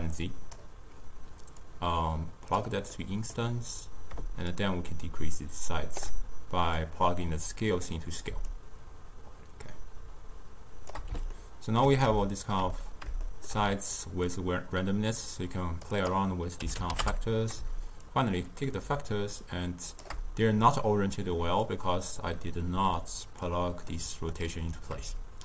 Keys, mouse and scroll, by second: 3.0-4.6 middle drag, 4.6-8.4 shift+drag, 8.5-11.4 shift+drag, 11.4-14.3 ctrl+middle drag, 14.3-21.2 drag, 21.7-24.0 drag, 24.0-25.4 middle drag.